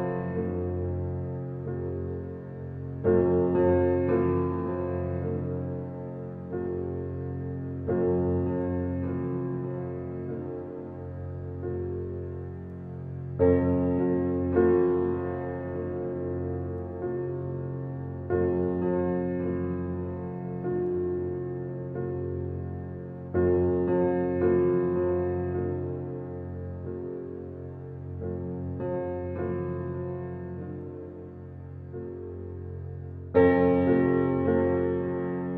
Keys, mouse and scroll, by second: 0.2 alt+z, 0.6 alt+z, 0.8-1.3 middle drag, 1.3 click, 1.8 click, 2.1-3.1 middle drag, 3.1 click, 3.4 click, 4.0-4.7 middle drag, 4.7-5.4 scroll up 1, 5.4-6.2 scroll down 7, 7.0 shift+a, 10.1 g, 11.5 alt+middle click, 12.2 g, 13.0-13.8 scroll up 9, 13.8 g, 15.5 alt+middle click, 16.0-16.7 scroll down 6, 16.7 alt+middle click, 17.2-17.9 middle drag, 18.4 g, 19.8 alt+middle click, 20.2 alt+middle click, 20.6 alt+middle drag, 21.1 Tab, 21.6-22.0 BackSpace, 22.3 h, 22.9 Tab, 23.3-23.7 scroll up 5, 23.7-24.1 shift+middle drag, 24.1 g, 26.8 g, 29.2 click, 29.4-31.0 middle drag, 31.0 click, 31.8 g, 33.5 middle click, 33.6-34.2 scroll up 4, 34.2-34.6 middle drag, 34.6 click.